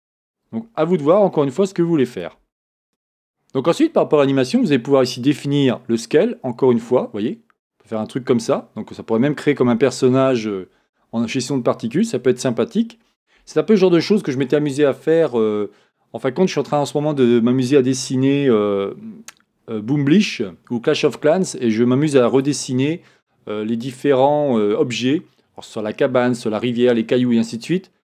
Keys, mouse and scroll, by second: 2.2 click, 2.9 click, 5.7-28.1 drag.